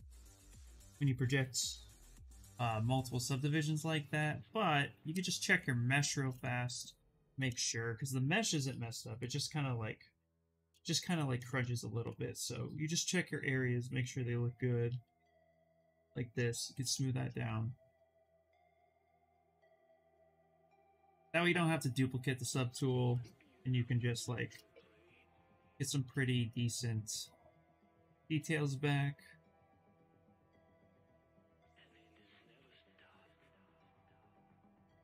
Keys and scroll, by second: 5.5 shift+f, 5.9 shift+f.